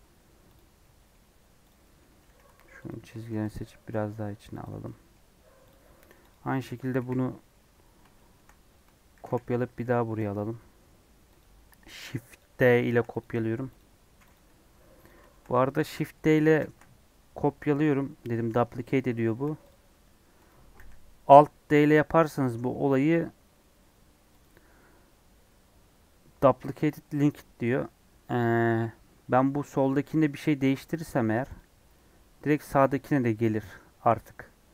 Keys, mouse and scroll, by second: 0.5 click, 0.7 middle click, 1.6 click, 1.8 middle click, 2.0 Tab, 2.2 2, 2.8 alt+click, 3.3 g, 4.6 Tab, 4.9 middle click, 5.2-5.6 scroll down 5, 5.6 click, 5.9 middle click, 6.2 click, 6.9 KP_1, 7.2 KP_3, 8.1 shift+middle click, 8.5 scroll up 1, 9.1 shift+d, 12.3 click, 12.5-12.8 scroll down 3, 12.8 shift+middle click, 13.1 click, 13.7 click, 14.3 x, 15.0 click, 15.2 shift+middle click, 15.5 scroll up 2, 15.8 shift+middle click, 16.5 shift+d, 19.6 x, 20.4 click, 20.7 alt+d, 29.7 click, 29.8 Tab, 30.1 scroll up 1, 31.1 ctrl+r, 32.6 scroll up 3, 33.3-33.7 scroll down 4.